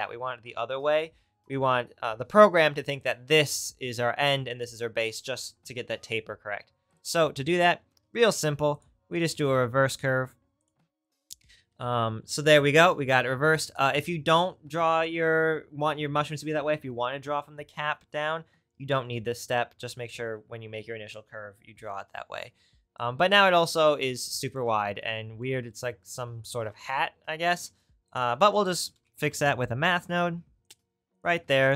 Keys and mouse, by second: 6.9-7.9 drag, 8.1 shift+a, 8.6-13.7 right drag, 27.6 shift+a, 31.2 click.